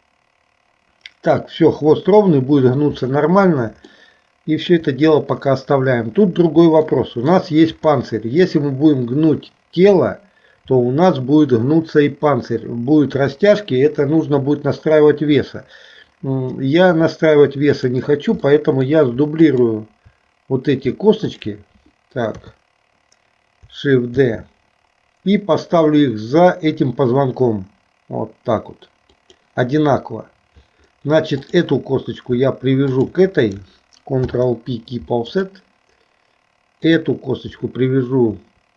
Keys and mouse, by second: 4.0 shift+middle click, 6.9 middle click, 8.1 middle click, 13.1 KP_3, 17.7 click, 18.6 middle click, 19.6 shift+click, 21.2 shift+click, 22.4 KP_3, 24.2 shift+d, 31.6 click, 33.0 shift+click, 34.2 ctrl+p, 36.9 click.